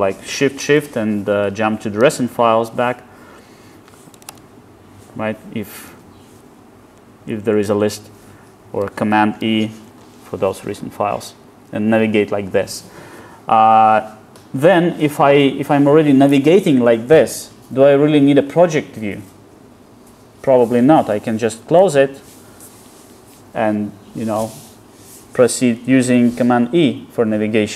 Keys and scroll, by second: 9.2 super+e, 21.4 super+1, 25.8 super+e.